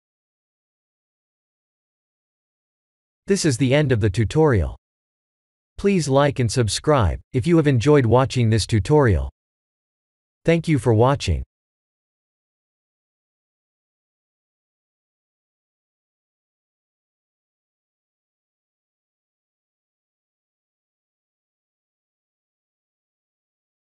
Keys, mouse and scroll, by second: 0.6 middle click, 2.6 shift+middle click, 3.2 shift+middle click, 4.9 middle click, 5.6 middle click, 5.8 middle click, 6.0 shift+middle click, 6.1 shift+middle click, 6.8 middle click, 6.8 middle click, 7.9 shift+middle click, 8.7 shift+middle click.